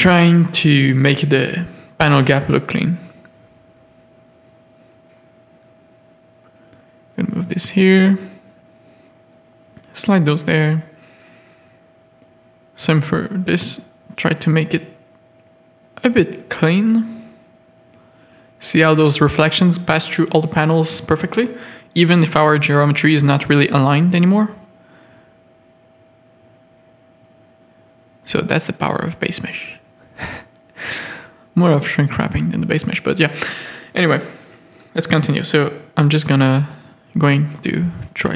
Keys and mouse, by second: 0.0 click, 3.1 click, 3.9 g, 5.6 g, 8.6 g, 9.7 a, 11.1 g, 12.3 shift+click, 12.5 g, 13.5 a, 16.3 Tab, 16.8 z, 18.7 Tab, 19.5 shift+middle click, 20.2 ctrl+r, 22.6 z, 22.8 a, 23.4 z, 23.8 g, 25.9 g, 29.2 g, 30.7 z, 31.0 a, 32.4 z, 33.0 ctrl+r, 34.4 click, 34.8 g, 36.3 z, 36.5 a, 36.8 z, 37.2 ctrl+r.